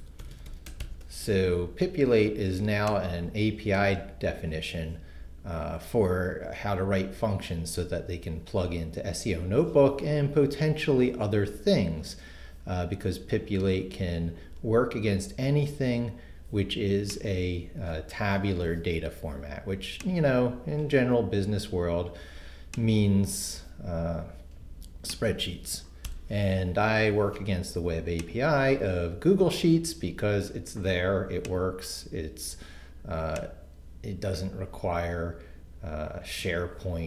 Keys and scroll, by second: 0.0-1.3 typing, 26.1 shift+BackSpace.